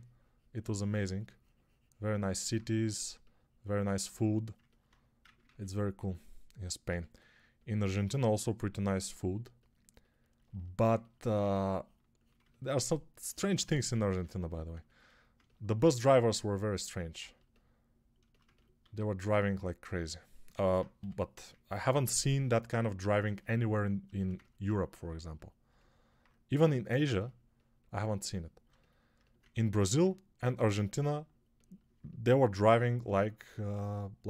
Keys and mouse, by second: 5.4 ctrl+r, 6.7 g, 11.2 1, 18.7 alt+q, 20.8 g.